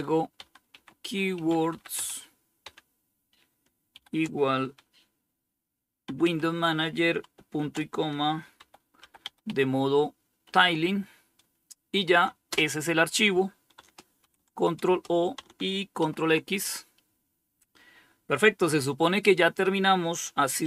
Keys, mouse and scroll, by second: 0.0-1.9 typing, 3.2 typing, 5.1-10.3 typing, 11.7 Return, 13.4 ctrl+o, 14.2 Return, 15.2 ctrl+x, 19.9-20.6 typing.